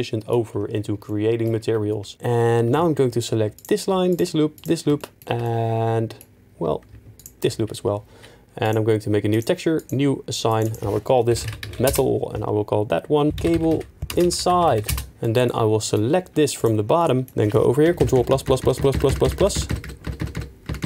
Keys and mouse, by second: 3.5 alt+click, 4.1 alt+shift+click, 4.5 alt+shift+click, 7.1 alt+shift+click, 8.6 click, 9.4 click, 9.8 click, 10.5 click, 10.7-11.9 drag, 13.3-14.9 drag, 18.0 ctrl+KP_Add, 18.1 ctrl+KP_Add, 18.3 ctrl+KP_Add, 18.4 ctrl+KP_Add, 18.6 ctrl+KP_Add, 18.7 ctrl+KP_Add, 18.9 ctrl+KP_Add, 19.1 ctrl+KP_Add, 19.2 ctrl+KP_Add, 19.4 ctrl+KP_Add, 19.5 ctrl+KP_Add, 19.7 ctrl+KP_Add, 19.8 ctrl+KP_Add, 20.0 ctrl+KP_Add, 20.2 ctrl+KP_Add, 20.3 ctrl+KP_Add, 20.7 ctrl+KP_Add, 20.8 ctrl+KP_Add.